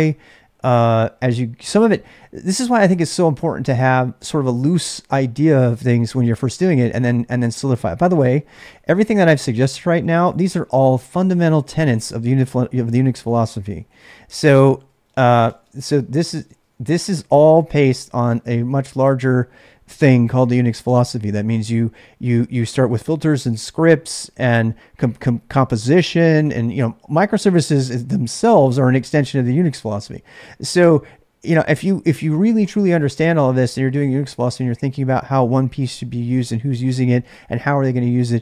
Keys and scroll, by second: 9.3-19.6 typing.